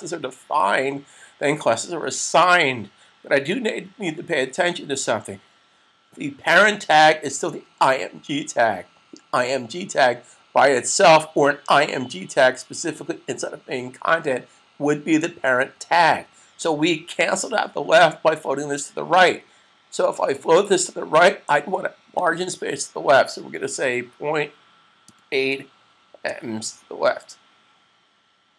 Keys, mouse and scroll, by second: 20.5 click, 23.9 ., 25.1-26.5 typing.